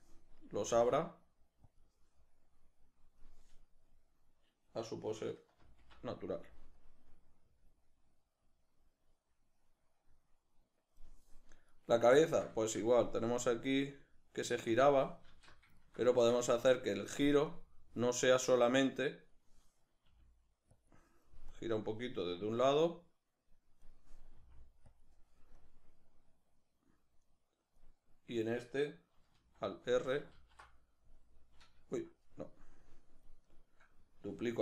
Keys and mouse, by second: 1.7 g, 3.2-11.8 drag, 11.8 right click, 12.3 ctrl+middle click, 12.6-13.2 shift+middle drag, 13.2-15.9 drag, 15.3 alt+q, 15.9-17.5 ctrl+shift+middle drag, 17.5-20.9 drag, 20.1 r, 21.9-25.0 drag, 24.4 r, 26.0-33.5 drag, 29.3 alt+r, 30.4 alt+r, 33.5 right click.